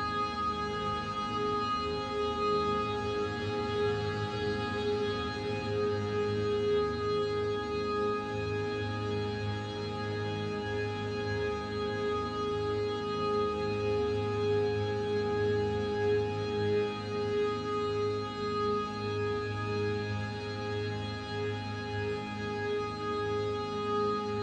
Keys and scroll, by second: 23.0 z, 23.8 ctrl+s.